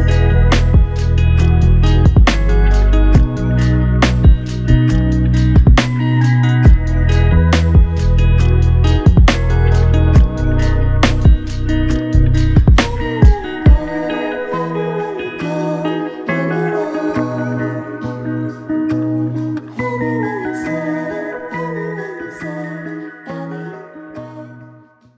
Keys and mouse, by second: 1.7 double click, 3.1 shift+click, 5.5 shift+click, 6.6 shift+click, 13.6 shift+click, 15.5 typing, 16.7 shift+click, 18.5 alt+click, 20.2 ctrl+alt+click, 21.2 alt+shift+click.